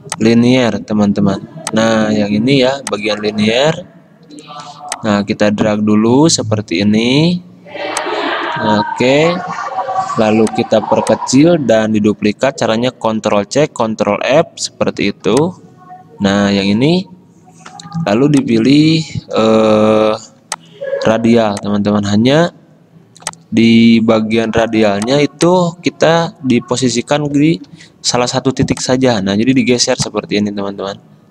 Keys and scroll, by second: 4.4 g, 10.0 v, 13.3 ctrl+c, 13.8 ctrl+f, 20.3 v, 27.8 g.